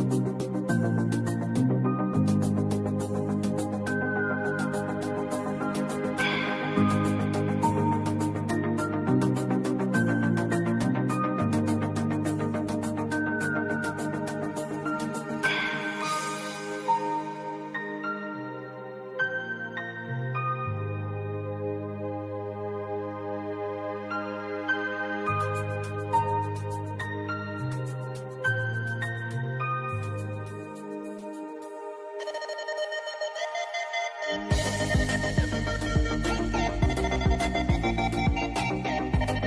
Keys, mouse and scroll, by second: 0.2 click, 1.6 v, 2.2 click, 3.0 right click, 3.4-7.9 drag, 7.9 v, 8.1 click, 10.1 click, 13.2 click, 14.5 click, 16.4 alt+scroll down 1, 17.9 click, 20.4 click, 21.9 alt+scroll up 1, 23.0-24.6 drag, 24.6-27.7 drag, 27.7 scroll up 1, 28.7-36.1 drag, 36.1-37.6 drag, 37.6-38.0 alt+scroll up 1, 38.8-39.4 drag.